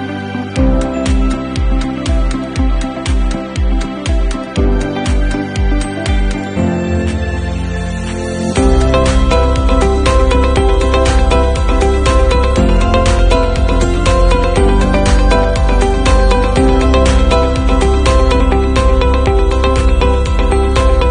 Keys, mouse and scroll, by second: 0.0 v, 0.6 i.